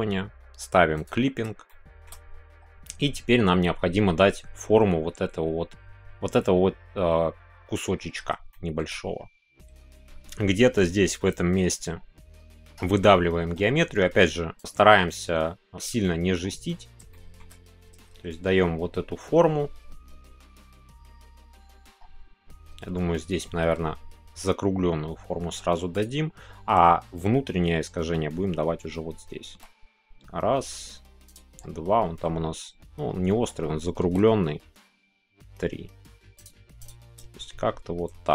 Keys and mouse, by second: 0.9 click, 1.7 shift+click, 2.0 shift+middle click, 8.5 shift+middle click, 14.5 click, 17.1 shift+middle click, 25.9 click, 29.4 e, 31.3 click, 36.3 click, 37.2 shift+g.